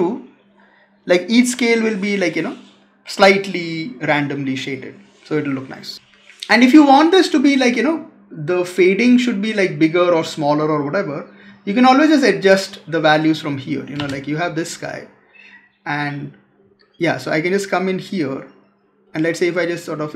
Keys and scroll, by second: 5.9 space.